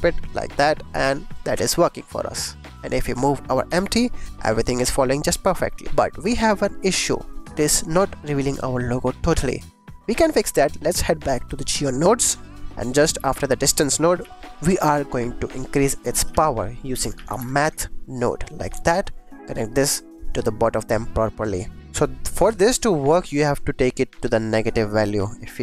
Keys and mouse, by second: 1.4 click, 3.0 click, 3.6 g, 3.7 x, 6.9 right click, 7.5 shift+click, 8.0 click, 11.1 click, 11.2 click, 11.7 click, 12.5 click, 13.1 g, 13.6 click, 13.8 click, 14.2 shift+a, 15.9 click, 16.2 shift+a, 18.5 click, 18.9 click, 19.4-21.7 drag, 22.2 click, 23.1-24.4 drag, 24.8-25.6 shift+drag.